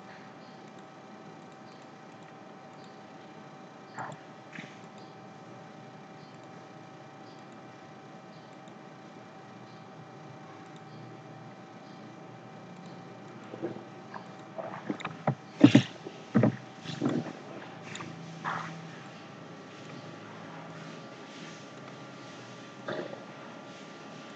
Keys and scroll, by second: 15.6 ctrl+c, 16.3 ctrl+f.